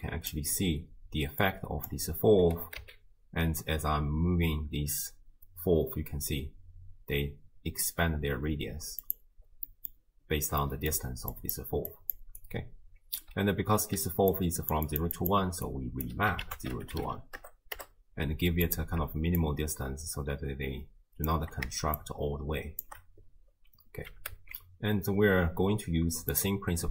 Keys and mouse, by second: 1.4 click, 2.6 g, 9.7 middle click, 10.6 middle click, 11.0-16.1 typing, 11.4 click, 11.9 click, 13.2 click, 14.3 click, 14.9 click, 15.7 click, 16.5 ctrl+a, 19.4-21.3 shift+drag, 22.0 shift+click, 24.1 g.